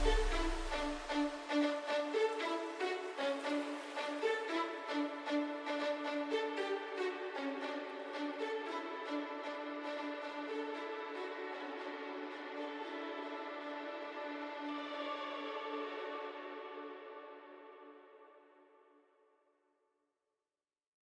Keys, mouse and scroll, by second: 0.4-3.0 drag, 4.2 Down, 10.9 right click, 12.1 click, 13.2-13.6 alt+scroll up 1, 14.4 m, 15.2 click.